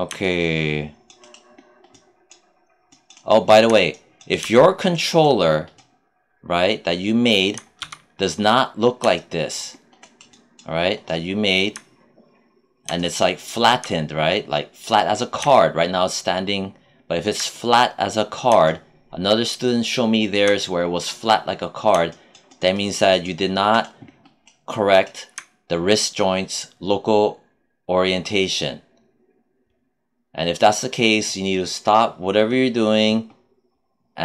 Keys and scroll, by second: 7.7 q.